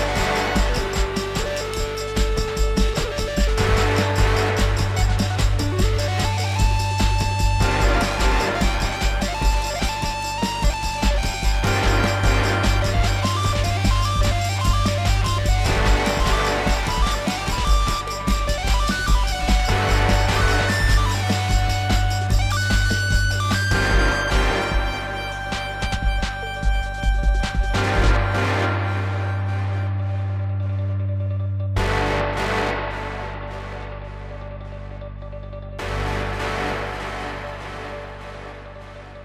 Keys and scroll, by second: 23.3 ctrl+z.